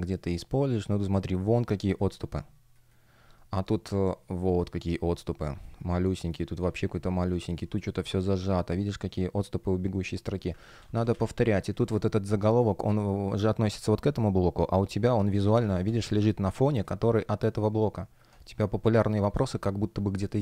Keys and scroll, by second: 0.6 shift+p, 7.4 space, 10.4 super+z, 11.3 space, 15.5 super+z, 18.7 space.